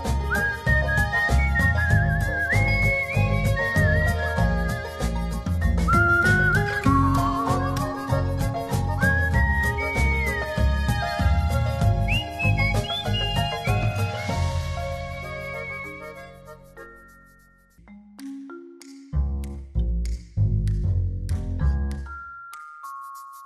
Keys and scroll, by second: 20.9-22.9 typing.